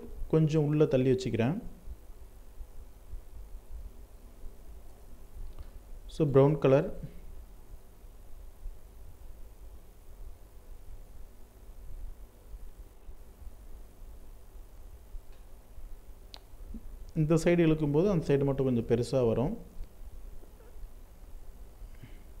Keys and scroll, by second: 14.2 ctrl+t.